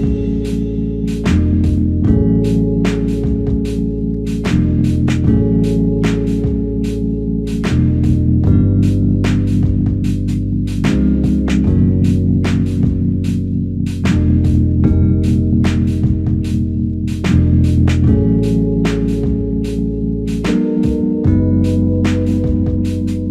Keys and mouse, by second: 16.3 alt+click, 17.8 alt+click, 19.2 alt+click, 20.3 alt+click, 22.7 alt+click.